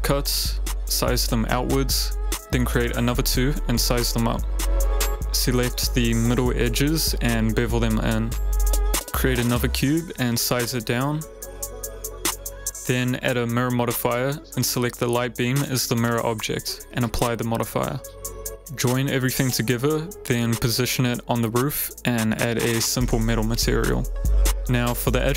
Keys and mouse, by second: 1.0 click, 1.7-2.1 typing, 2.9 ctrl+z, 4.1 s, 4.3 x, 7.1 ctrl+b, 9.6 shift+a, 11.0-12.6 typing, 13.7 g, 15.4 r, 16.1 click, 17.1 click, 19.7 ctrl+z, 20.7 middle click, 21.6 g, 21.6 z, 23.0 click, 23.3 click, 23.5 middle click, 24.5 click, 24.5 middle click, 25.2 middle click.